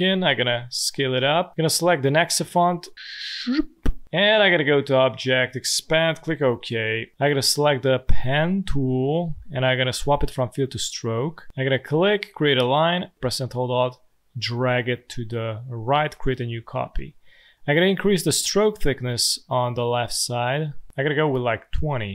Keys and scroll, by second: 5.9 Return.